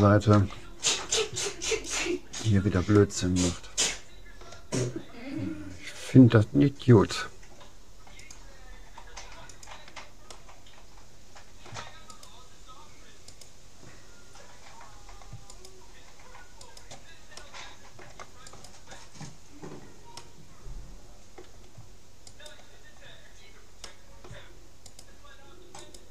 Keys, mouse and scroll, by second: 1.9-3.5 right drag, 3.1-4.7 middle drag, 8.3-9.9 drag, 10.3-11.9 middle drag, 12.1-15.0 right drag, 15.5-18.2 right drag, 17.4-19.1 middle drag, 18.5-20.1 right drag, 20.2-21.9 middle drag, 22.3-23.9 right drag, 23.9-25.5 middle drag, 24.9-26.1 right drag.